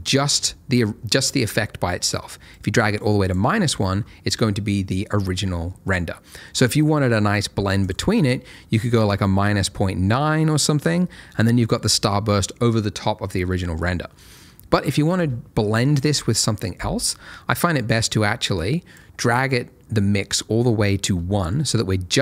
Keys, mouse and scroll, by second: 2.5 click, 7.8 click, 14.1 middle click, 18.5 click.